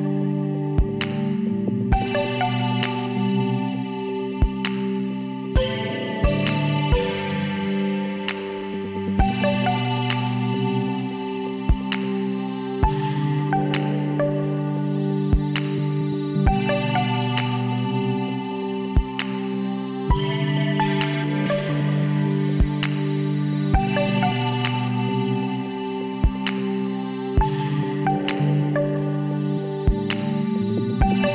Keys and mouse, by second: 2.3-3.4 middle drag, 4.0 KP_7, 5.4 z, 8.2-9.8 drag, 9.1 z, 9.8 middle click, 10.2 z, 11.3-13.1 drag, 12.3 l, 14.4-16.2 drag, 18.2-20.0 drag, 21.0 s, 24.6 z, 24.9 middle click, 25.9 a, 28.0-30.8 middle drag, 30.8 click.